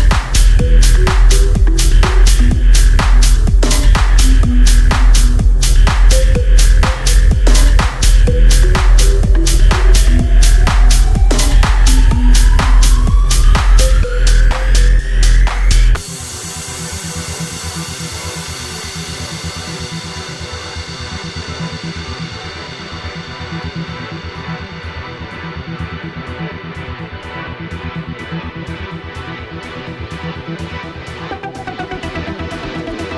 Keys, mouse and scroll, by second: 17.8-18.8 scroll down 1, 19.2 click, 25.8 ctrl+z, 27.2-30.5 drag, 30.5 click.